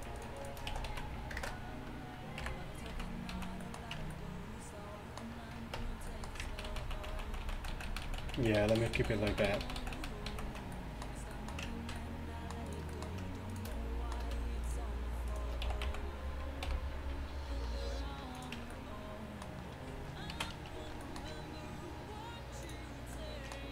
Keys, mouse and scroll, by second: 0.8 s, 2.5 KP_1, 3.0 z, 3.4 z, 4.0 Tab, 5.8 Tab, 6.6-8.3 ctrl+z, 8.4 ctrl+z, 8.6 ctrl+z, 8.8 ctrl+z, 9.1 ctrl+z, 9.9 ctrl+z, 10.0 ctrl+z, 10.3 ctrl+z, 12.7-15.7 drag, 15.7 s, 18.8 Tab, 20.4 ctrl+2, 22.7-23.7 drag.